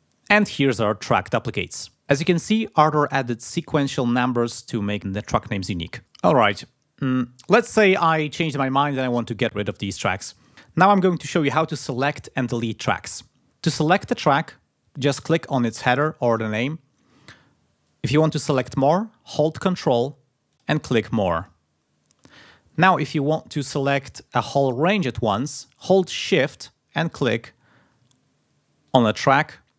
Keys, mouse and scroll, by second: 15.8 click, 20.5 ctrl+click, 21.4 ctrl+click, 28.9 shift+click.